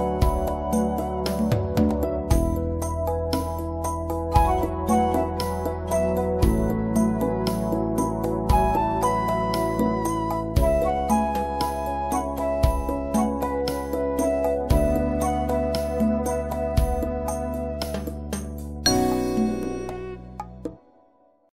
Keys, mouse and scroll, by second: 15.2-15.5 scroll down 1, 18.1 scroll up 1, 19.7 click.